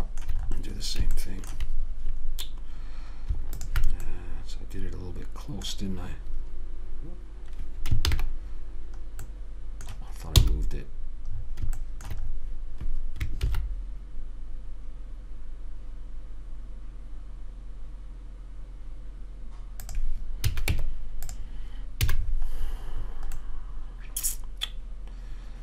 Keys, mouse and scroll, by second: 3.8 right click, 4.4 click, 4.5 middle click, 4.5 right click, 5.2 right click, 5.8 click, 9.6 ctrl+shift+click, 9.8 ctrl+shift+middle click, 9.9 ctrl+shift+click, 10.0 ctrl+shift+middle click, 10.7 ctrl+shift+f, 11.7 middle click, 13.7 ctrl+b, 20.8 a, 21.0 Tab, 22.4 a, 22.5-24.2 middle drag.